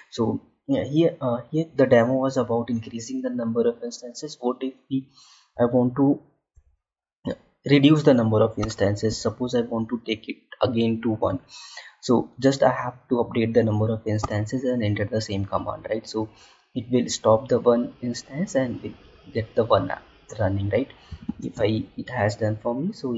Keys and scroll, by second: 21.3 space.